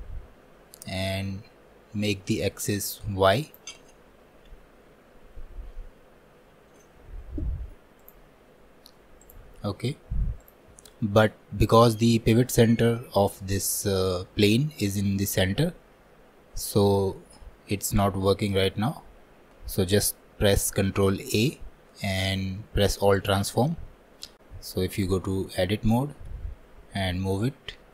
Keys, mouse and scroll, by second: 3.5-6.5 drag, 8.1-21.1 drag, 21.1 ctrl+a, 25.1 Tab.